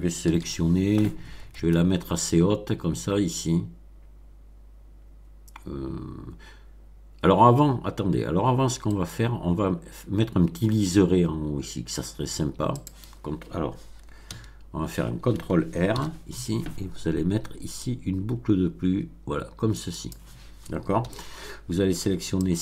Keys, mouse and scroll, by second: 0.2 b, 8.9 middle click, 12.7 click, 14.3 a, 15.9 ctrl+r, 17.8-19.9 drag, 19.9 click, 20.9 a, 22.4 click.